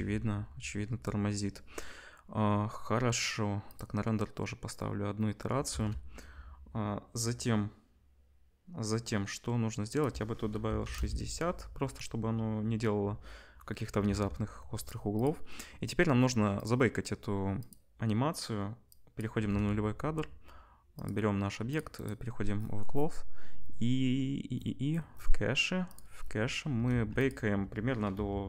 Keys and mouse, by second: 5.5-15.3 ctrl+drag, 5.7 ctrl+s, 14.0 ctrl+s, 15.3-16.6 middle drag, 16.6 click, 16.7 middle click, 17.6 click, 17.7-18.9 middle drag, 18.9-21.1 drag, 19.5 ctrl+s, 21.1 middle click, 21.7 click, 22.1-25.9 middle drag, 25.9-28.4 drag, 26.9 ctrl+s.